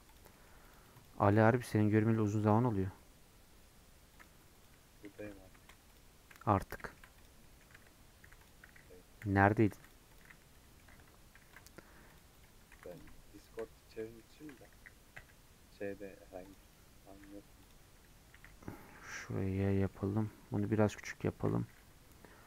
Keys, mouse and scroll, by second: 0.6 click, 1.1 right click, 1.3-2.4 middle drag, 2.4 click, 2.8-3.4 scroll up 3, 5.6 click, 6.1 scroll down 1, 6.3 middle click, 7.2 click, 7.4 middle click, 7.6 scroll up 1, 7.8 Tab, 8.5 click, 9.5 p, 9.7 Tab, 9.8 click, 10.5 middle click, 10.9 Tab, 11.1-11.5 scroll up 1, 11.5 ctrl+r, 12.7 3, 13.0 click, 13.8 scroll up 2, 13.9-15.2 shift+middle drag, 15.2 i, 17.7 right click, 18.4 s, 19.6 middle click, 20.5 s.